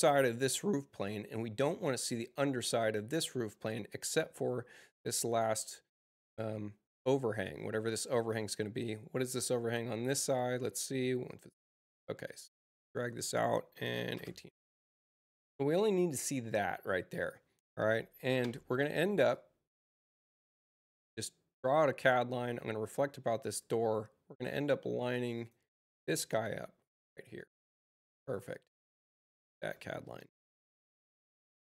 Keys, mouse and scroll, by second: 5.2-7.6 drag, 8.7 click, 9.4 click, 10.1 click, 12.2 click, 12.8 Return, 19.2 click, 20.6 click, 23.4 click, 24.5 click, 25.3 right click, 26.3 click, 28.0 space, 28.6-29.0 drag.